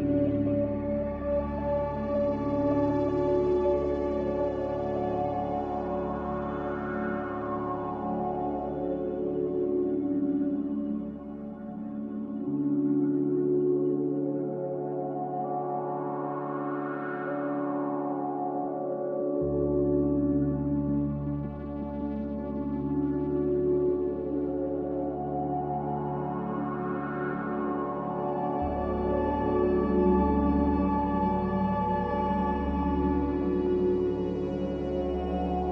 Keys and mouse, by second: 0.2-0.8 middle drag, 2.2 shift+middle click, 3.6 Tab, 5.0 Tab, 7.0 shift+middle click, 10.5 click, 10.8 g, 13.3 ctrl+z, 13.5 ctrl+z, 13.7 ctrl+z, 13.8 ctrl+z, 14.0 ctrl+z, 14.2 ctrl+z, 14.8 ctrl+z, 15.0 ctrl+z, 15.2 ctrl+z, 15.4 ctrl+z, 15.8 ctrl+z, 16.0 ctrl+z, 16.2 ctrl+z, 16.4 ctrl+z, 16.6 ctrl+z, 17.3 ctrl+z, 17.6-18.4 middle drag, 20.4 shift+middle click, 22.6 ctrl+r, 25.3 middle click, 27.1 shift+middle click, 29.4 click, 34.6 click, 35.4 s.